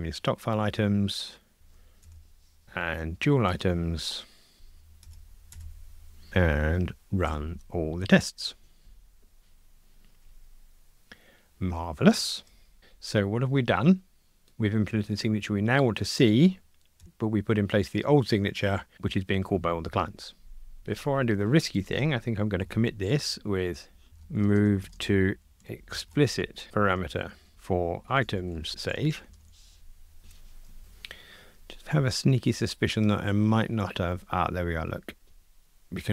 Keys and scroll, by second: 1.6 alt+Up, 4.5 alt+Up, 7.3 ctrl+r, 22.6 super+k.